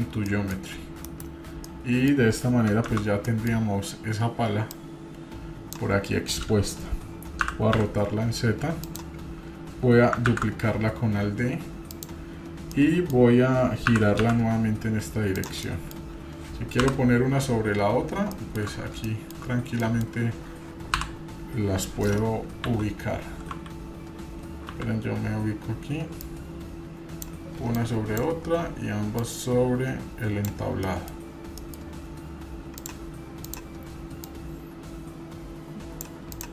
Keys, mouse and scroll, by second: 0.3 middle drag, 1.0 KP_Decimal, 1.6 middle click, 2.9 shift+z, 3.3 middle drag, 4.7-5.8 drag, 10.3 alt+d, 12.7 middle click, 13.9 r, 15.7-16.0 middle drag, 16.8 KP_1, 17.7 scroll up 3, 18.3 shift+middle drag, 18.7 scroll up 2, 19.1 shift+middle drag, 19.4 scroll up 2, 19.8 middle click, 20.9 KP_1, 22.6 KP_4, 23.5-24.3 scroll down 1, 23.5 KP_4, 24.7 KP_4, 26.2-27.2 drag, 26.2 KP_1, 27.8 click, 29.1-30.5 drag, 30.7-31.1 scroll down 4, 30.9-31.3 middle drag, 31.6 middle click, 32.8 drag, 33.4 click, 34.2-36.1 drag, 36.3 drag.